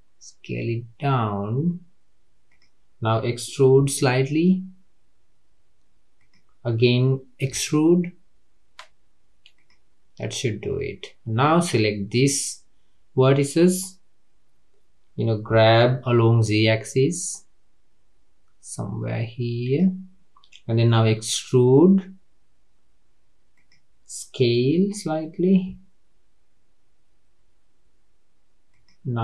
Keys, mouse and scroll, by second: 3.8 e, 7.5 e, 11.4 click, 15.5 g, 21.2 e, 25.6 s.